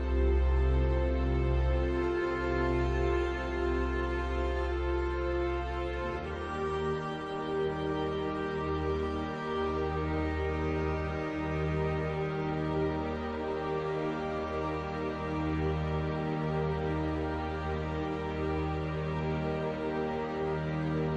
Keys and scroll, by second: 12.2 ctrl+t.